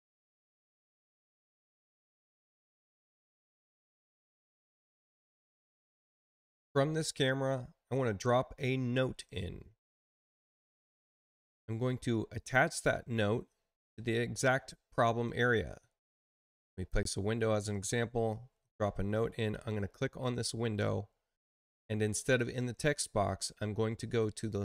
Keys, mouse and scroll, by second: 4.9-10.5 middle drag, 16.7 click, 20.1 click, 22.1 click.